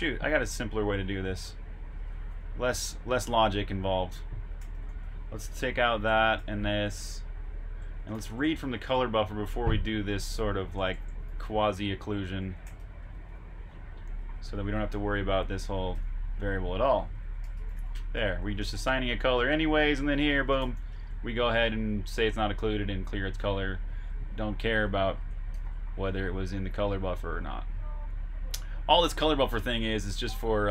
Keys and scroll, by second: 2.0 super+Tab, 2.9-5.6 typing, 11.8 typing, 25.4-26.6 typing, 29.6 Escape, 29.8 typing.